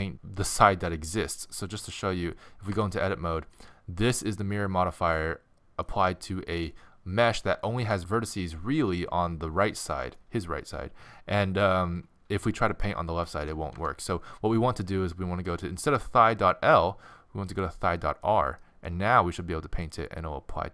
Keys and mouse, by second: 2.7 Tab, 3.6 a, 4.2-6.8 middle drag, 7.2-8.7 middle drag, 10.2-12.5 middle drag, 13.8 Tab, 16.6 middle click, 17.5 right click, 18.2-19.5 middle drag, 19.9 middle click.